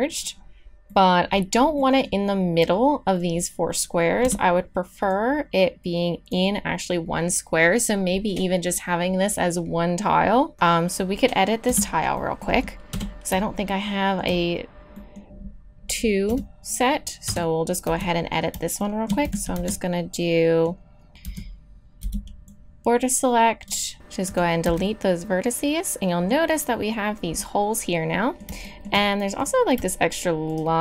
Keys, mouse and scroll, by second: 0.4 middle click, 1.1 middle click, 4.3 Tab, 5.1-7.1 drag, 11.7 Tab, 11.7 click, 12.9 KP_1, 16.3 KP_3, 17.3 KP_1, 17.8 z, 19.2 a, 19.5 z, 21.2 z, 22.0 b, 23.9 x, 24.6 z.